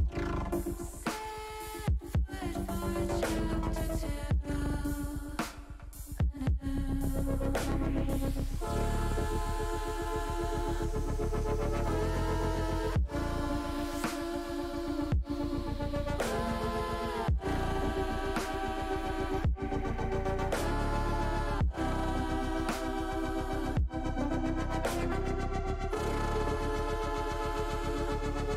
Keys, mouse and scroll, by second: 3.5 click, 5.4 click, 6.1 click, 7.4 click, 7.8 click, 9.9 click, 11.4 click, 11.8 click, 12.7 click, 14.0 click, 20.9-22.6 drag, 23.2 click, 25.5-28.5 drag.